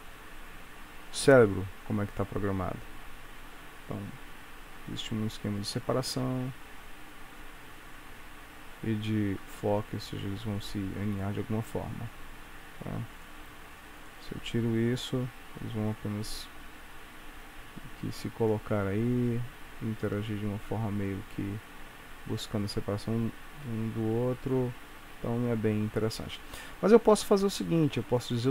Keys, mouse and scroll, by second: 13.0 Escape, 13.2 click, 14.1 click, 14.5 space, 25.1 Escape, 27.1 scroll down 1, 28.3 click.